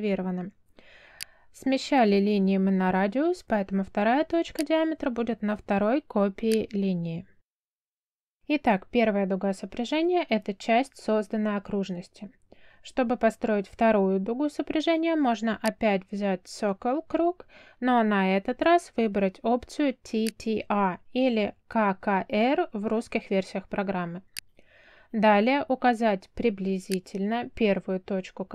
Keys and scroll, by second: 17.9 c, 18.9 space.